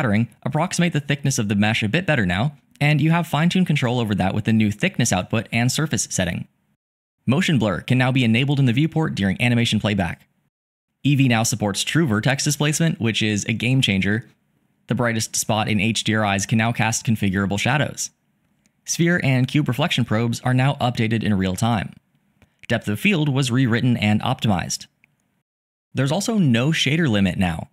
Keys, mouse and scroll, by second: 15.1-18.6 shift+middle drag, 23.0-25.7 shift+middle drag.